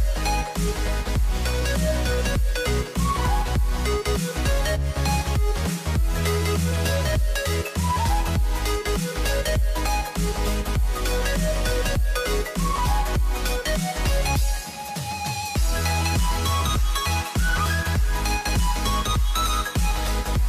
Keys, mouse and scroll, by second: 0.7 ctrl+r, 2.3 z, 3.0 KP_7, 4.0 shift+middle click, 4.2 scroll down 1, 4.3-5.2 scroll up 6, 5.2-6.7 shift+middle drag, 6.9 scroll down 1, 7.2 middle click, 7.9 KP_7, 8.9 b, 10.9 scroll down 1, 11.2 b, 12.5-13.6 middle drag, 13.6-14.4 scroll down 1, 14.4 x, 15.3 Tab, 15.9 z, 16.3 scroll down 1, 16.4 middle click, 17.0 scroll up 3, 17.1 middle click, 17.6 scroll down 2, 17.7 middle click, 18.3-19.9 drag, 20.2 click.